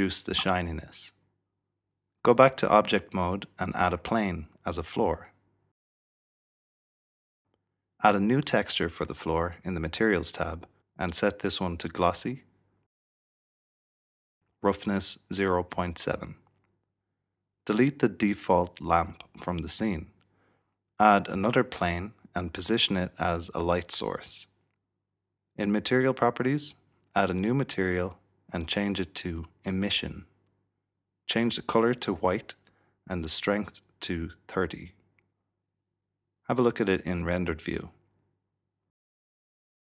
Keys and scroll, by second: 0.7-3.9 typing, 1.8 Return, 5.2 s, 7.3 typing, 15.2-16.6 typing, 19.2 typing, 21.1 shift+a, 23.5-26.0 typing, 31.1 typing, 36.0-37.2 typing.